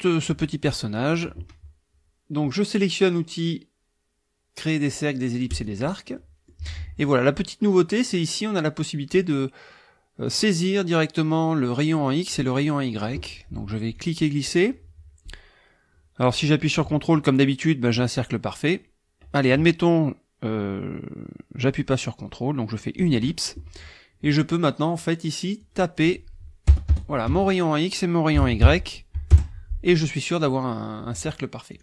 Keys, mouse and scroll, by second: 0.8 click, 5.5 click, 6.2 click, 12.6 click, 13.9-23.2 drag, 25.6-26.1 drag, 26.7 BackSpace, 27.3 Tab, 28.4 KP_2, 29.3 KP_Enter, 31.7 click.